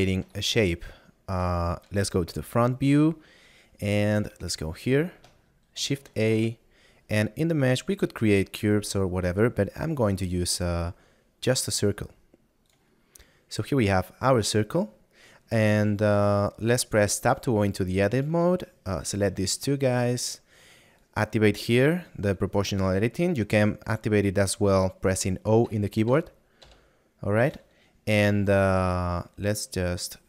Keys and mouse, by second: 0.1 middle click, 20.9 click, 26.6 o, 29.0 s.